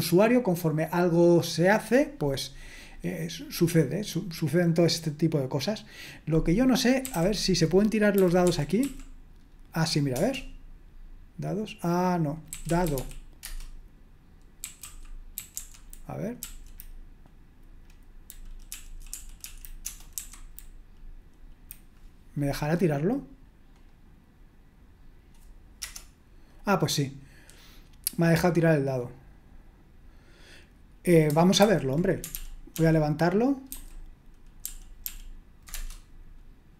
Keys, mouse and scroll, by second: 6.4 click, 6.8-9.3 typing, 10.1 Return, 12.2-13.4 typing, 14.6-16.0 typing, 16.4 Up, 18.7 Right, 18.9 Right, 19.1 Right, 19.4 Right, 19.8-20.1 typing, 23.7 click, 25.8 Return, 31.6 super+h, 32.3 ctrl+p, 32.7 ctrl+p, 33.7 ctrl+n, 34.6 ctrl+p, 35.0 ctrl+p, 35.7 Return.